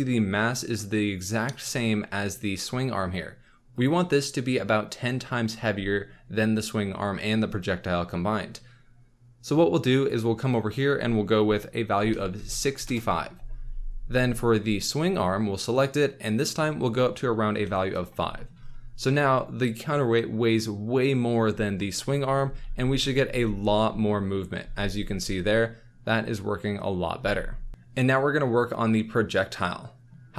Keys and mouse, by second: 3.8 click, 10.2-12.8 drag, 14.7 click, 16.3-17.9 drag, 22.4 space, 23.2 space, 24.6 space, 27.2 space.